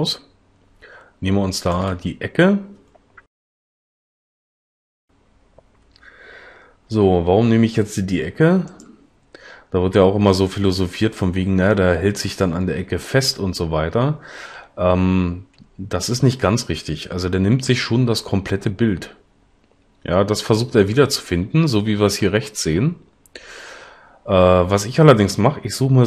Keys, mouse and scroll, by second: 7.0 g.